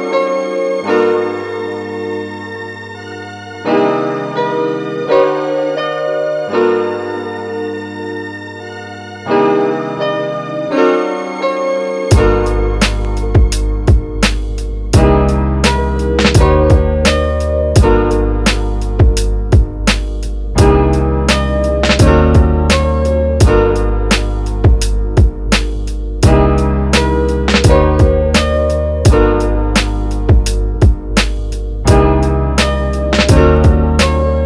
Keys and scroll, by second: 6.1 space, 12.5 space, 32.8 space.